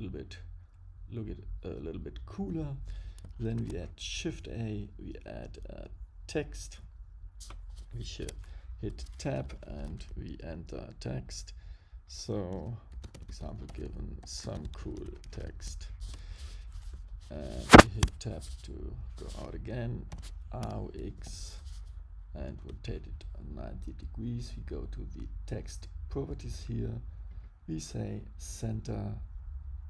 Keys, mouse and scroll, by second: 3.5 shift+a, 8.2 Tab, 8.9-9.5 BackSpace, 12.5-15.3 typing, 16.0 Return, 17.3 BackSpace, 18.0 Tab, 20.1 r, 24.3 click, 26.5 click.